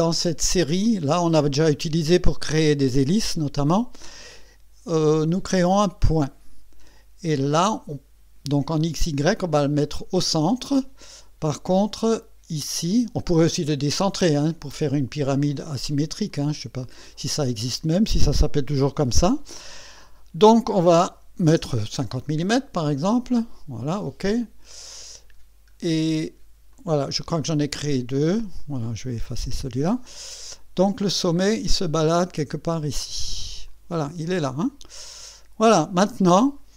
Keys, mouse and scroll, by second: 0.8 click, 6.2 click, 12.2 click, 16.3 click, 16.8 click, 21.0 KP_5, 21.5 KP_0, 22.6 click, 24.7 click, 25.3-25.7 scroll down 1, 26.7 click, 28.6 click, 29.4 Delete, 30.1-31.3 drag, 31.4-31.9 scroll up 2, 33.7 click, 34.2-34.7 scroll down 2, 34.9-35.9 drag.